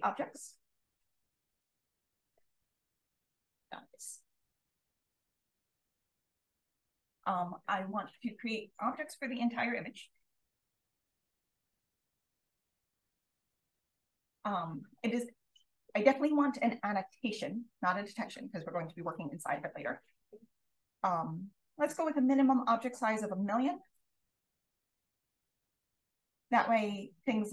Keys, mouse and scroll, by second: 10.5 click, 12.3 click, 13.3 click, 15.6 click, 19.0 click, 20.5 click, 23.6-24.6 typing, 26.4-26.9 scroll up 1, 27.1-27.5 scroll up 1.